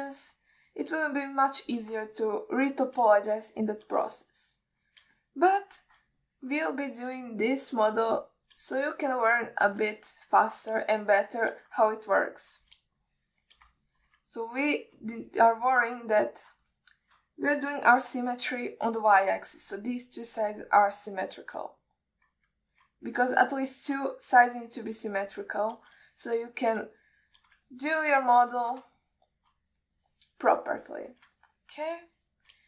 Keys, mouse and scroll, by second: 0.3 alt+shift+middle click, 1.1 ctrl+middle click, 1.6 middle click, 2.4 shift+click, 3.4 alt+shift+middle click, 4.5 shift+click, 5.5 alt+shift+middle click, 6.5 shift+click, 7.5 middle click, 8.7 shift+click, 9.4 alt+shift+middle click, 10.3 shift+click, 11.3 alt+shift+middle click, 12.2 shift+click, 13.2 alt+shift+middle click, 14.3 shift+click, 15.1 ctrl+alt+middle drag, 15.6-16.1 middle drag, 16.4-16.8 ctrl+alt+middle drag, 17.3 alt+middle click, 18.0-18.5 alt+shift+middle drag, 19.0 KP_3, 22.2-22.7 middle drag, 23.2-23.6 ctrl+alt+middle drag, 24.3 ctrl+alt+middle click, 24.8-25.2 alt+shift+middle drag, 26.0-26.4 shift+drag, 26.6 shift+click, 27.3 shift+middle click, 28.3 shift+click, 29.0 alt+shift+middle click, 29.5 alt+middle click, 30.3 alt+shift+middle click, 31.3 click, 32.1 ctrl+alt+middle click.